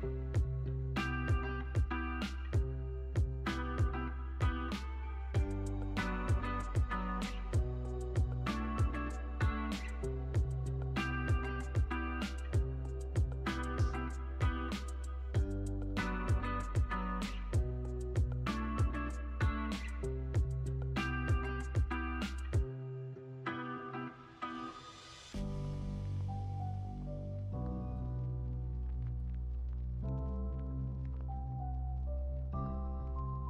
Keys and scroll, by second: 7.8 super+c, 8.0 super+v, 11.2 super+c, 11.4 super+v.